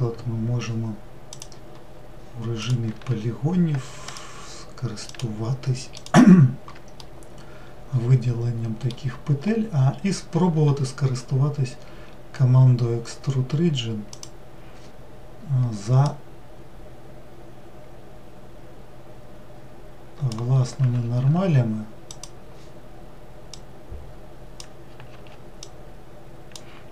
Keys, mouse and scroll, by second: 4.1 alt+click, 5.1 alt+click, 5.9 alt+click, 7.0-9.8 middle drag, 9.8 scroll up 1, 14.1-17.0 drag, 22.1 click, 23.5 click, 25.6 click.